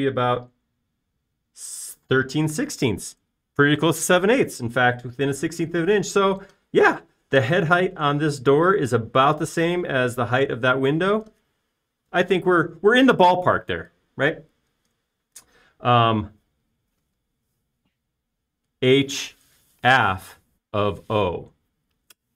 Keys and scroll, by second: 5.9 e.